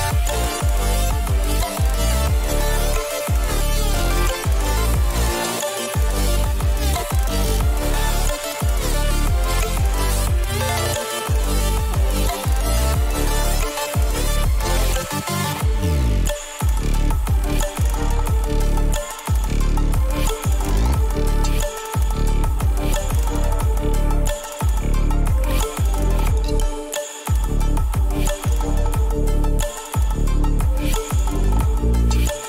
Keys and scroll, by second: 25.3 Return.